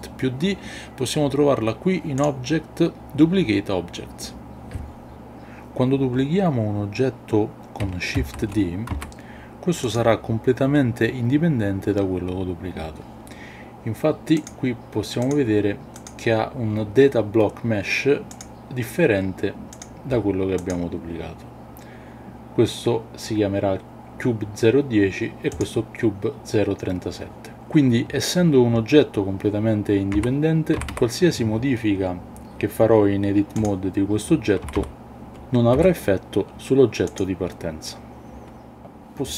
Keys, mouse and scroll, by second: 2.2-5.2 drag, 8.2 shift+d, 8.9 x, 9.9 click, 14.4 click, 16.0 click, 20.5 click, 25.5 click, 30.2 Tab, 30.8 a, 30.9 a, 33.6 click, 34.6 a, 34.8 a, 35.7 g, 37.1 click.